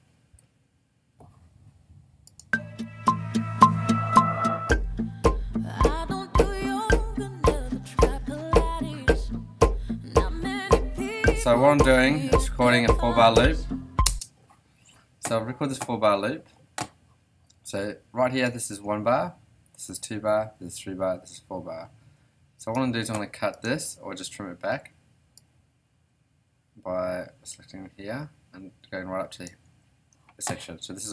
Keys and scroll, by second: 14.0 space.